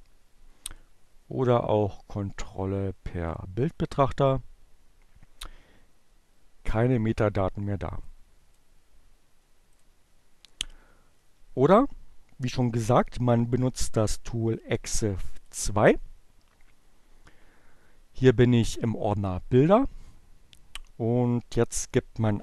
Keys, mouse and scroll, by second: 7.1 click, 8.8 click, 9.7 click, 22.1-22.4 typing.